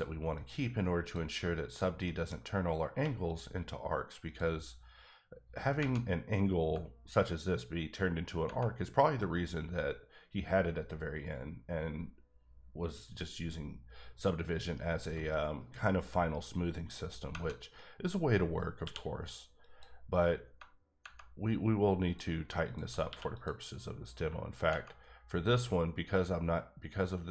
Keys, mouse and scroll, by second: 0.3 click, 1.0 click, 1.6 shift+click, 2.0 shift+middle click, 2.4-2.9 scroll up 1, 2.9 q, 3.2 click, 4.2 click, 5.7 Tab, 17.3 Tab, 18.8 q, 19.6 click, 20.4 Tab, 21.0 Tab, 22.0 click, 23.0 q, 23.3 click, 24.1 Tab, 24.6 Tab.